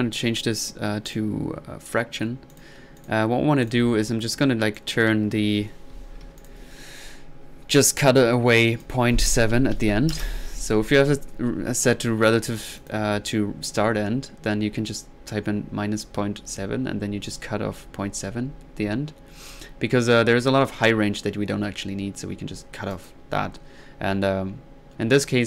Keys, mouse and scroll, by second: 1.1 click, 2.5 click, 3.0 drag, 3.6 click, 4.0-4.4 middle drag, 4.8 click, 8.7 click, 12.8-13.4 drag, 21.4 middle click, 22.9-23.2 drag.